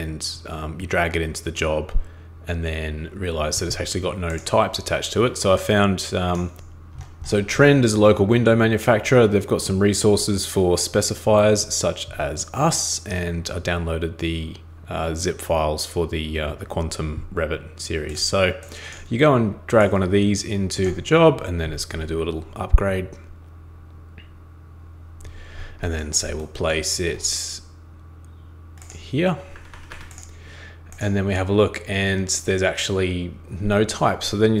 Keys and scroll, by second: 29.5 super+Escape, 29.7 super+Escape.